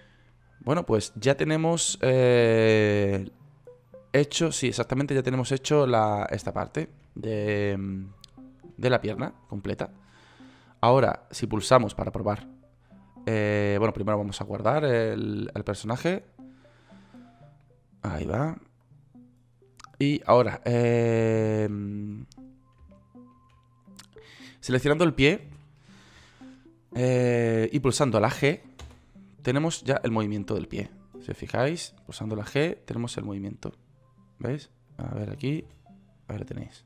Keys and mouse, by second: 8.1 middle click, 21.3-28.3 right drag, 29.3 g, 35.0 right click, 36.1 g.